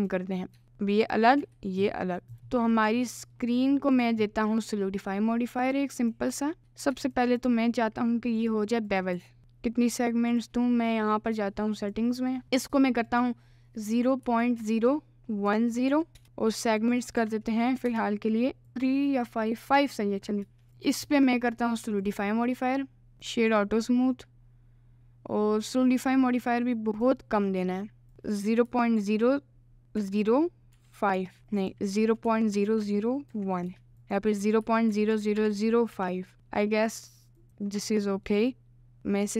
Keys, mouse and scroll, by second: 0.4 middle click, 0.6 Tab, 0.6 g, 1.5 g, 2.0 middle click, 2.7 middle click, 3.4 middle click, 5.7 click, 6.1 click, 6.6 q, 7.0 Tab, 7.1 click, 7.4 click, 8.5 click, 8.9 click, 9.2 1, 9.4 ctrl+shift+b, 20.5 Tab, 20.7 ctrl+z, 21.1-22.1 middle drag, 22.1-23.1 drag, 23.3 right click, 25.8-27.1 drag, 28.2-31.3 drag, 31.8-33.9 drag, 32.8 0, 34.0-36.3 drag, 37.3 click, 37.7 click, 38.3 middle click, 39.0-39.3 right drag.